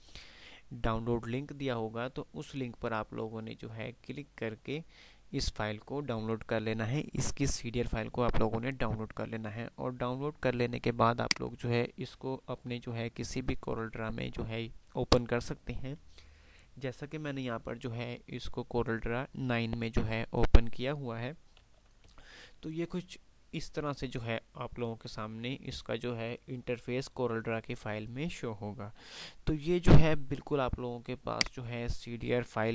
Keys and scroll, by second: 22.0 F9, 31.5 F9.